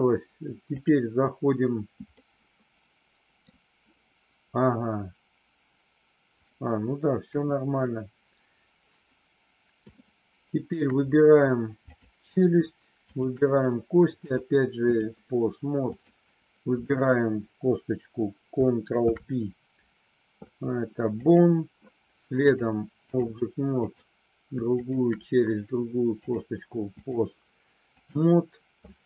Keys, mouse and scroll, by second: 2.1-3.3 middle drag, 7.2 KP_3, 9.9 shift+middle click, 11.8 click, 14.5 click, 15.9 click, 18.9 ctrl+p, 22.6 click, 23.8 click, 26.2-27.2 drag, 27.9 click.